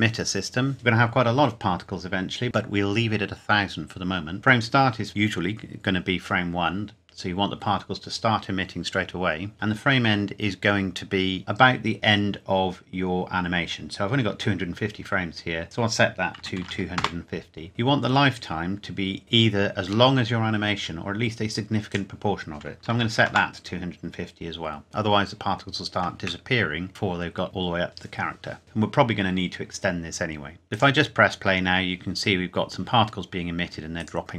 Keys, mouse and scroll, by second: 15.6 click, 16.4 KP_2, 16.5 KP_5, 16.6 KP_0, 17.0 KP_Enter, 21.8 click, 22.8 KP_2, 23.0 KP_0, 23.2 KP_Enter, 23.9-25.0 scroll up 1, 26.2 shift+Num_Lock, 26.2 scroll up 1, 26.4 shift+middle click, 30.5 scroll up 1, 30.7 click, 32.4 scroll down 1, 34.0 click.